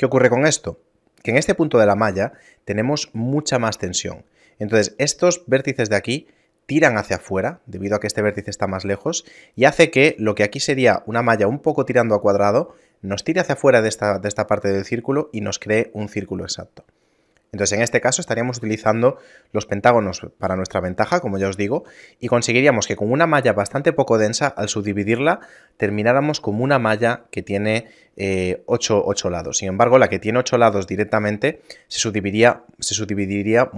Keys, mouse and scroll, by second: 21.8 a, 29.9 middle click, 30.3-31.5 scroll down 2, 31.5 middle click, 32.0 scroll up 2.